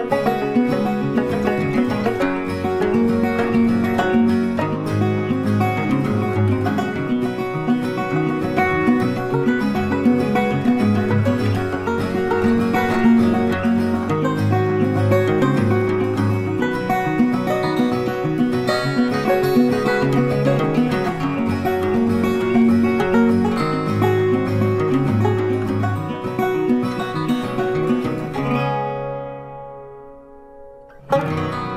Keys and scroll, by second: 13.7 ctrl+t, 24.4 ctrl+t.